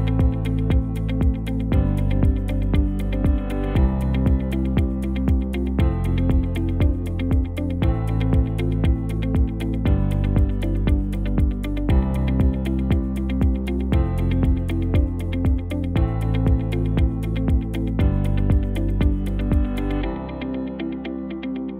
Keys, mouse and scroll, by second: 0.1 shift+z, 1.6 Tab, 2.3 a, 4.6 alt+s, 7.7 Tab, 8.4 KP_0, 14.0 space, 15.0 ctrl+s.